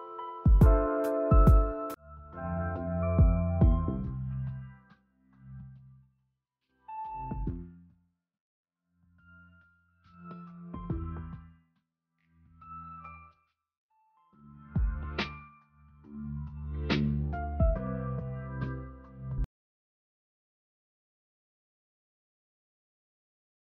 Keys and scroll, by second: 1.4 space, 1.7 ctrl+s.